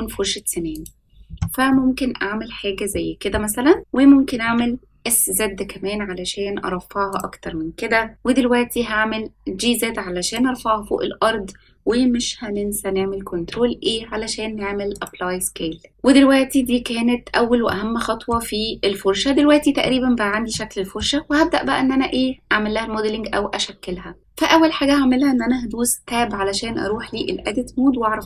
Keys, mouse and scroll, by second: 1.6-2.9 middle drag, 4.2 s, 8.5 g, 13.2 ctrl+a, 15.9 middle click, 16.5 scroll up 1, 17.6-18.2 middle drag, 20.5-20.9 shift+middle drag, 26.0 Tab.